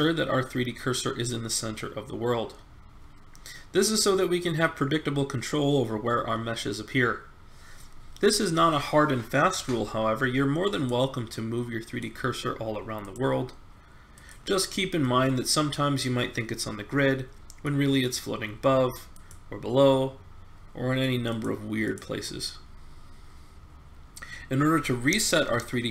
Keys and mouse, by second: 10.7-15.1 drag, 15.1-16.9 middle drag, 19.1-19.6 drag, 19.6-20.7 right drag, 20.7 middle click, 21.5-22.6 right drag, 22.6-24.1 drag.